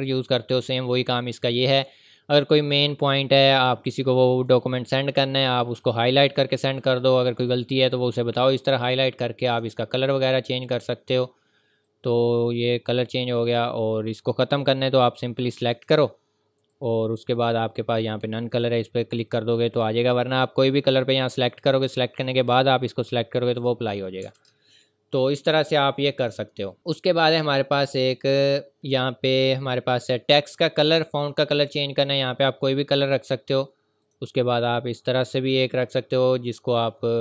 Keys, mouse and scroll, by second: 5.8 click, 27.3 click, 31.7 click.